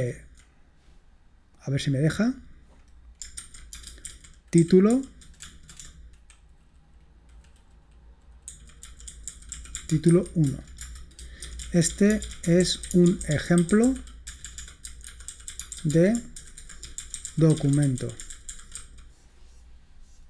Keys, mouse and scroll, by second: 0.0 typing, 1.6 click, 3.4-5.9 typing, 8.7-19.3 typing.